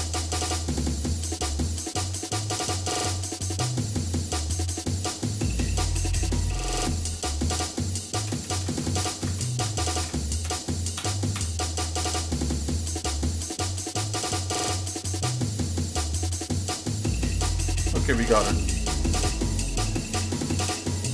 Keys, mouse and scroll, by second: 0.3 middle click, 1.4 shift+click, 1.8 shift+middle click, 2.6-3.2 scroll up 3, 4.2 shift+click, 4.7 shift+middle click, 5.5-5.8 scroll down 2, 5.9 middle click, 6.3 shift+middle click, 8.2 ctrl+KP_Add, 8.4 ctrl+KP_Add, 8.8 ctrl+KP_Add, 9.1 ctrl+KP_Add, 9.3 ctrl+KP_Add, 9.4 ctrl+KP_Add, 9.6 ctrl+KP_Add, 10.1 ctrl+KP_Add, 10.5 ctrl+KP_Add, 11.0 ctrl+KP_Add, 11.5 ctrl+KP_Add, 12.6-14.5 shift+middle drag, 16.2 click, 16.7 click, 17.4 shift+middle click, 18.3 scroll up 1, 18.3 middle click, 18.9-19.7 scroll down 5, 19.7 middle click, 20.2 middle click, 20.7 middle click.